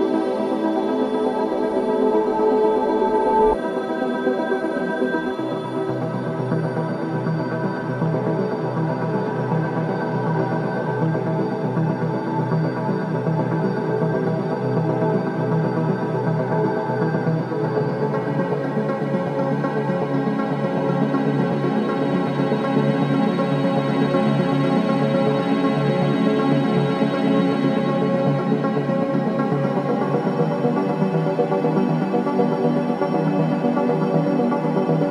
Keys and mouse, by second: 0.2 shift+d, 0.5 z, 2.5 click, 3.3 click, 4.4 Tab, 4.5-7.1 typing, 7.8 Tab, 9.4 click, 10.2 Tab, 11.4 Left, 11.6 Left, 11.8 Left, 11.9 Left, 12.1 Left, 12.3 Left, 12.5 Left, 12.7 Left, 13.4 BackSpace, 13.9 BackSpace, 13.9-14.6 BackSpace, 15.9 Tab, 19.5 click, 21.3-25.0 drag, 26.4 click, 27.6 g, 32.4-33.5 drag.